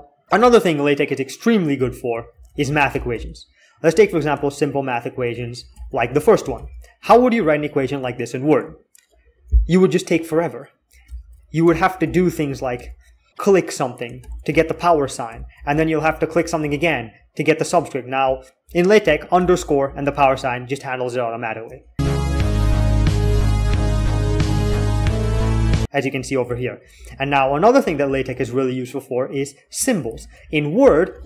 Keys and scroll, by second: 0.2-6.8 typing, 9.2 typing, 10.9 alt+k, 11.2-12.5 typing, 13.8-16.6 typing, 18.3-20.0 typing, 26.5-29.0 typing, 30.2 alt+x.